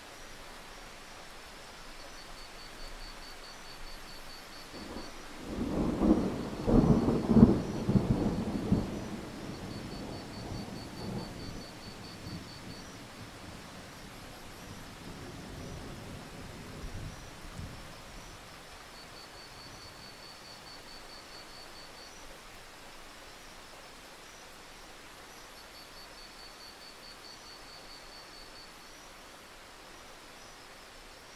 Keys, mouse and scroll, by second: 0.9-2.3 scroll down 1, 2.3-4.5 drag, 4.8-6.8 scroll down 1, 6.8 click, 7.7 scroll down 1, 8.5 click, 13.7-15.3 scroll up 1, 15.3 click, 15.6-16.5 scroll up 1, 16.5 click, 16.6-17.3 scroll down 1, 17.3 click, 17.5 scroll down 1, 17.7 click, 20.2-21.7 scroll up 1, 21.7 click, 22.0-22.9 scroll down 1, 22.9-24.5 drag, 24.7 ctrl+z, 25.8 click.